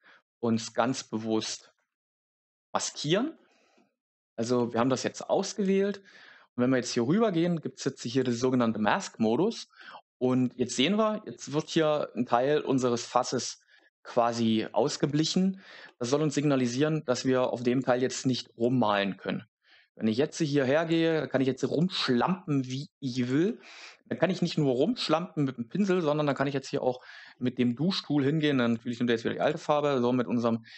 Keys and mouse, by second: 4.0 shift+middle click, 5.5 Tab, 8.0 click, 17.5 click, 18.5 click, 23.4-28.6 middle drag, 28.6 click.